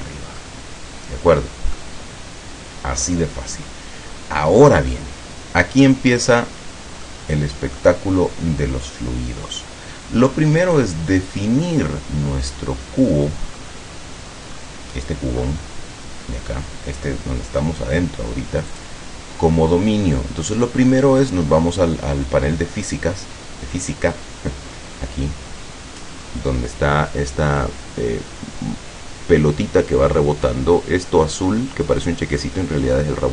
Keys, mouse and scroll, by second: 0.5-2.0 middle drag, 5.1-5.6 scroll down 1, 7.1-8.0 middle drag, 10.7 right click, 13.6-14.0 scroll down 1, 14.7 scroll down 2, 15.5-15.9 scroll up 1, 18.8 click.